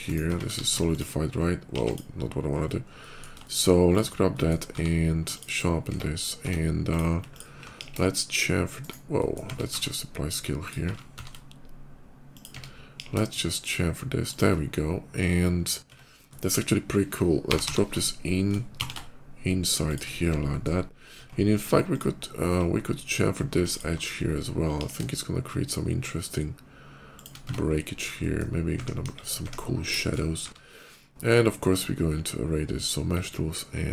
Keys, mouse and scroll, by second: 0.1 Tab, 0.3 q, 0.7 Tab, 0.7 ctrl+click, 1.6 x, 2.6 middle click, 2.8 middle click, 3.3 shift+middle click, 3.7 shift+click, 4.2 middle click, 4.4 q, 5.2 click, 5.5 q, 5.7 Tab, 6.2 Tab, 6.7 click, 7.1 click, 7.6 b, 8.6 right click, 8.8 middle click, 9.0 shift+middle click, 9.3 Tab, 10.5 Tab, 10.5 ctrl+click, 10.5 a, 11.0 ctrl+a, 12.0 click, 12.3 Tab, 12.7 ctrl+b, 13.4 Tab, 14.1 shift+click, 15.7 Tab, 16.0 middle click, 17.1-18.6 typing, 19.7 click, 20.3 middle click, 20.8 shift+middle click, 20.9 Tab, 21.7 click, 22.7 /, 23.5 ctrl+click, 23.9 /, 24.6 ctrl+b, 27.0 shift+click, 27.2 Tab, 27.8 middle click, 27.9 middle click, 28.6 `, 28.9 KP_5, 29.3 `, 29.8 shift+middle click, 30.2 q.